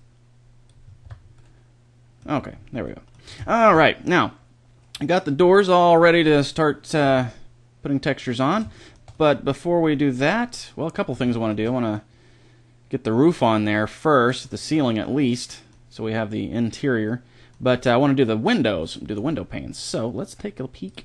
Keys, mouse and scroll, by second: 0.7 click, 0.7 middle click, 0.9 Tab, 3.1-4.7 middle drag, 4.9 middle drag, 6.9 a, 7.3 middle click, 7.5 middle click, 8.1-9.2 middle drag, 9.7 middle click, 10.3-10.8 middle drag, 10.9-14.9 middle drag, 18.3-18.7 right drag, 18.7-20.0 middle drag.